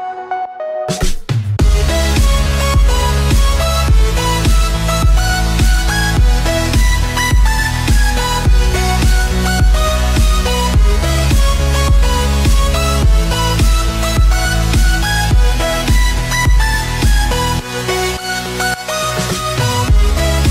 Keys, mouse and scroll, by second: 9.2 click, 10.0-12.4 scroll down 1, 12.4 click, 13.2 click, 13.6-16.7 middle drag, 16.7 click, 17.1-17.5 scroll up 2, 17.5-20.5 middle drag.